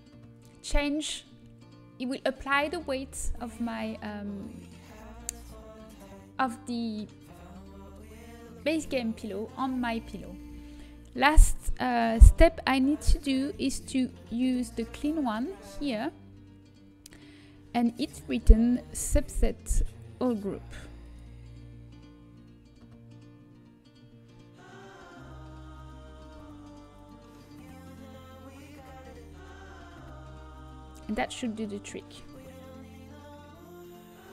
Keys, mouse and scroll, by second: 1.3-3.0 middle drag, 4.4-7.6 middle drag, 15.7-17.7 drag, 20.1-22.6 drag, 31.0-33.6 middle drag.